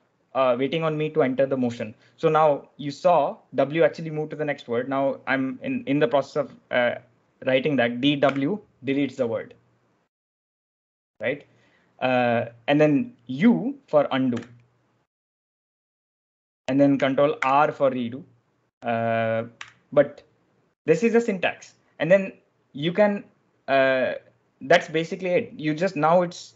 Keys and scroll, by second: 8.1 w, 14.2 u, 17.3 ctrl+r, 19.5 u.